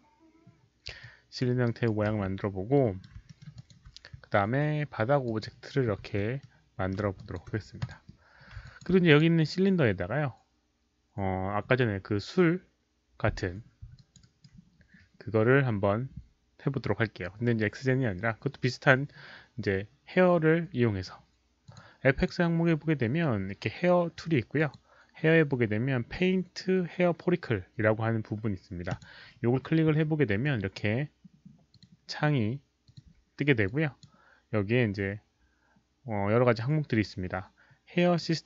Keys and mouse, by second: 1.0 alt+click, 1.4 alt+w, 1.4 alt+middle click, 1.6 alt+right drag, 1.8 alt+w, 1.8 alt+middle click, 2.7 alt+drag, 2.7 alt+right click, 2.7 w, 2.8 alt+right click, 2.8 w, 3.2 alt+middle click, 3.5 alt+click, 5.2 alt+click, 5.9 r, 6.4 alt+middle click, 7.1 alt+click, 7.5-9.3 typing, 7.8 alt+click, 7.8 alt+middle click, 7.8 alt+right click, 8.6 alt+click, 8.8 alt+middle click, 9.0 alt+click, 10.5 alt+click, 10.5 alt+middle click, 10.5 r, 12.6 alt+click, 13.0 alt+click, 13.0 middle click, 13.0 r, 13.9 alt+click, 14.2 alt+right drag, 15.8 alt+click, 15.8 middle click, 15.8 r, 18.5 alt+right click, 18.5 alt+click, 19.9 alt+right click, 19.9 alt+click, 21.6 alt+click, 22.1 alt+click, 24.5 alt+click, 28.9 click, 30.4 click, 31.7 click, 32.8 click, 33.6 click.